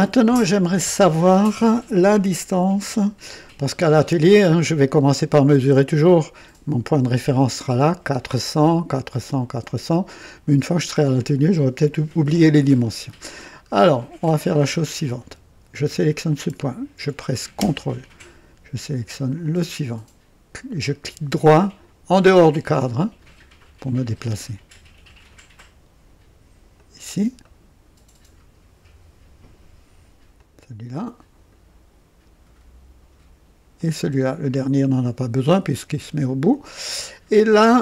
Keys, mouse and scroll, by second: 0.3-0.6 scroll down 1, 2.1-3.4 right drag, 3.5-3.9 scroll down 1, 12.8-13.1 scroll up 2, 13.4 scroll up 2, 13.9-14.5 right drag, 15.8 click, 19.4 ctrl+click, 22.9-24.2 right drag, 26.7 click, 27.4-28.5 ctrl+right drag, 30.3 ctrl+click, 30.9-31.7 ctrl+right drag, 33.7 ctrl+click, 37.1-37.6 scroll down 2.